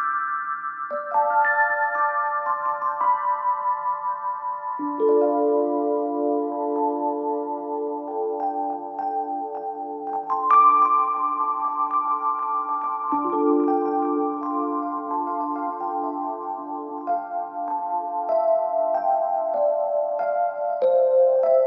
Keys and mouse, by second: 1.3 g, 3.9-5.0 drag, 3.9-5.0 right drag, 5.6 Tab, 6.3 click, 6.8 shift+click, 6.8 shift+right click, 7.2 click, 7.2 right click, 7.9 middle click, 8.9 shift+middle click, 9.4 middle click, 9.9 shift+middle click, 10.7-12.1 middle drag, 14.2 shift+middle click, 14.8 shift+middle click, 15.9 a, 18.2 shift+middle click, 19.2 Tab, 19.3 click, 20.0 ctrl+a, 21.2 click.